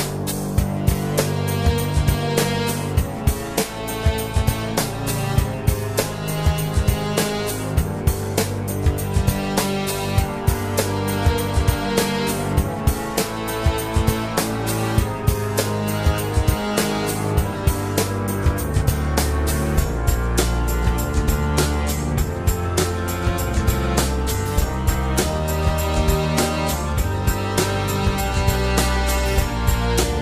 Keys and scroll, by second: 0.0 Tab, 24.2 ctrl+1, 25.4 alt+z, 26.6 alt+z.